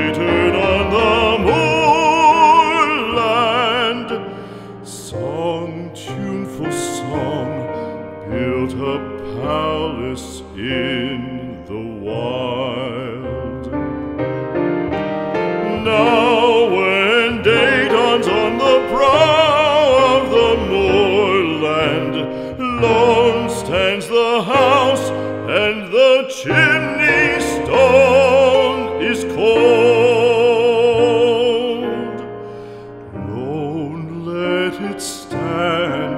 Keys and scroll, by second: 9.0 p, 12.3 space, 21.4 space.